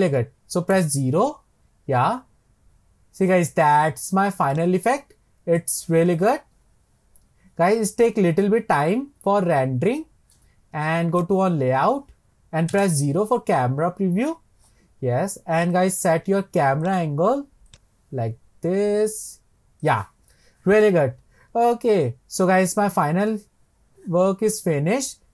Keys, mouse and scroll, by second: 0.8 KP_0, 1.8-2.4 scroll up 2, 4.7-9.0 drag, 11.3 click, 12.7 KP_0, 15.8 click, 17.8-22.0 drag.